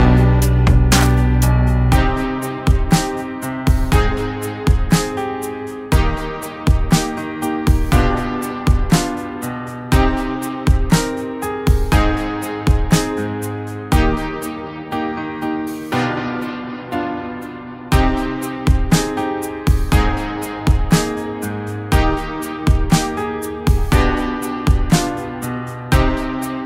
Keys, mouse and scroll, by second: 0.5 click, 0.5 click, 2.9 ctrl+z, 3.8 click, 5.8 Right, 8.0-10.0 drag, 10.8 right click, 10.8 right click, 11.8 click, 14.8 ctrl+z, 16.1 click, 17.0 ctrl+z, 19.3 click, 20.5 ctrl+z, 21.4 click, 21.4 click, 22.9 ctrl+z.